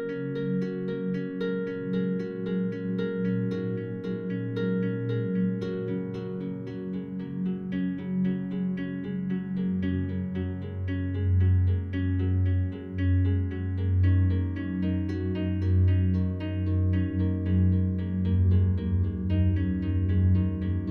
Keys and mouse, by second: 1.1 click, 2.1 ctrl+s, 2.9-3.8 drag, 4.0-5.4 drag, 5.4 ctrl+s, 6.2 click, 7.6 click, 8.6 click, 9.9-11.7 drag, 12.1 click, 12.5 click, 15.7-16.6 drag, 16.6 ctrl+s, 18.4 click.